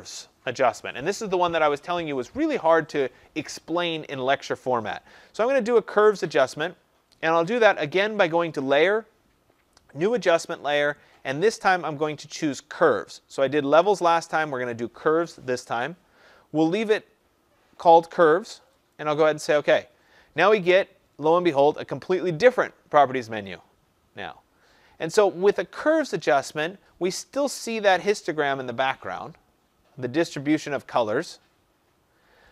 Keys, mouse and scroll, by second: 8.8 click, 15.7 click, 18.9 click, 24.0 click.